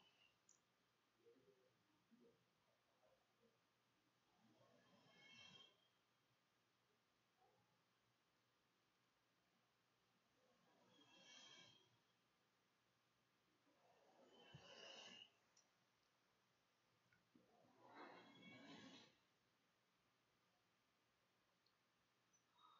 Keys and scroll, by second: 0.8 \, 3.8-5.1 typing, 5.2 Delete, 6.9 Home, 7.7 BackSpace, 8.4 BackSpace, 9.2 BackSpace.